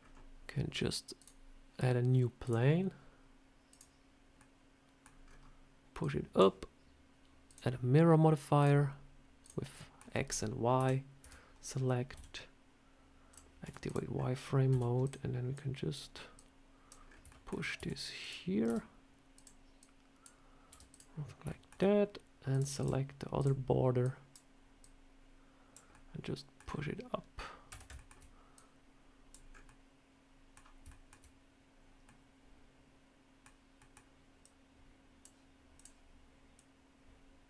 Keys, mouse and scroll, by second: 1.0 click, 2.3 click, 4.2 middle click, 5.1 scroll down 4, 5.8 click, 7.3 click, 9.3 click, 9.6 middle click, 10.6 KP_7, 11.1 Tab, 11.5 scroll up 2, 12.0 s, 13.5 z, 14.0 scroll up 2, 14.5 s, 15.4 click, 16.2 click, 16.9 scroll up 2, 17.1 shift+middle click, 17.6 s, 18.5 r, 19.6 click, 20.5 r, 21.3 shift+middle click, 22.4 click, 22.6 click, 23.2 click, 23.9 click, 24.7 click, 25.8 middle click, 26.5 scroll down 4, 27.6 a, 27.8 shift+middle click, 28.4 click, 29.4-29.7 scroll up 3, 29.5 middle click, 30.7 shift+middle click, 31.9 middle click, 33.6 middle click, 34.3 click, 35.6 click, 36.7 click.